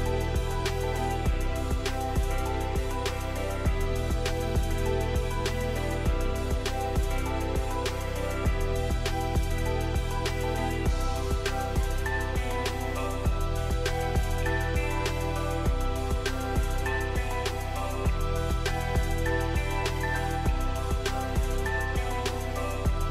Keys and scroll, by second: 0.8 j, 14.7 j, 22.6 z.